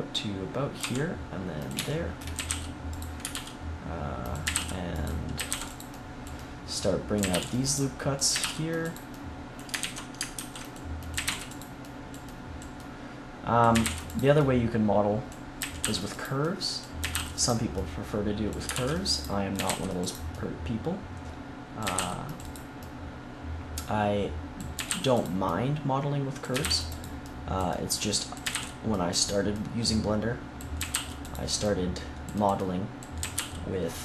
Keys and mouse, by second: 0.8 e, 1.8-3.6 drag, 2.3 a, 2.4 c, 3.3 ctrl+r, 5.0 click, 5.3 a, 5.4 c, 7.1 a, 7.3 c, 8.3 a, 8.4 c, 9.7 ctrl+z, 10.3 ctrl+r, 11.1 a, 11.2 c, 13.7 a, 13.8 c, 15.5 a, 15.8 c, 16.9 a, 17.1 c, 18.7 ctrl+r, 19.5 a, 19.6 c, 21.8 a, 21.9 c, 22.5-24.5 middle drag, 24.7 a, 24.8 c, 25.3-29.2 drag, 26.5 a, 26.6 c, 28.4 a, 28.5 c, 29.2 middle click, 30.7 a, 30.9 c, 33.1 a, 33.3 c.